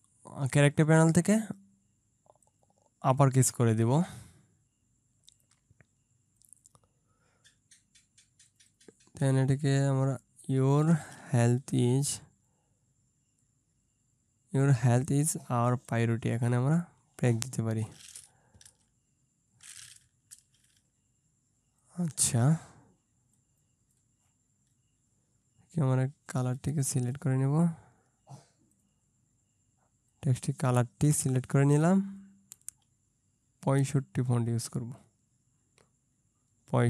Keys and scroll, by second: 11.5 Return, 16.2 Return, 18.7 ctrl+z, 20.1 Return, 31.9 ctrl+space.